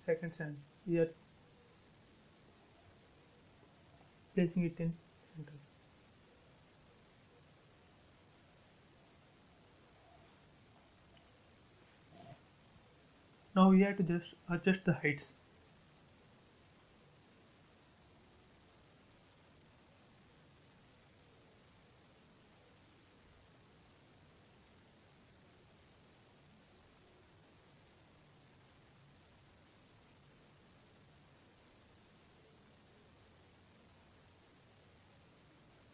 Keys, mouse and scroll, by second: 0.5 scroll up 1, 3.2 click, 3.4 space, 3.5 scroll down 1, 6.4 middle click, 7.1 scroll up 1, 7.8 shift+middle click, 8.2 middle click, 8.9 scroll up 1, 10.2-12.1 middle drag, 12.1-12.7 scroll down 1, 14.0 click, 15.1 p, 15.4 click, 16.6 Up, 20.1-21.9 typing, 20.9 Return, 21.8 click, 23.7 click, 25.0 shift+middle click, 26.3 p, 26.6 click, 28.9-30.8 typing, 29.7 Return, 30.6 click, 31.0 scroll down 1, 32.4 click, 33.3 m, 33.5 click, 34.5 Up.